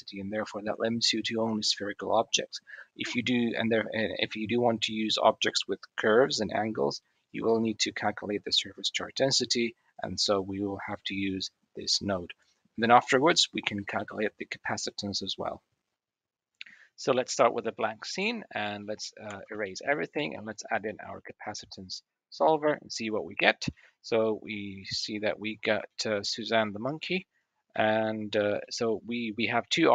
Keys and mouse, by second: 7.1 click, 18.1 middle click, 18.8 middle click, 19.1 a, 19.2 x, 20.6 click, 23.6-23.9 middle drag, 25.1 click, 25.6-26.0 shift+middle drag, 26.5 middle click, 27.5 shift+middle drag, 28.4-29.0 middle drag.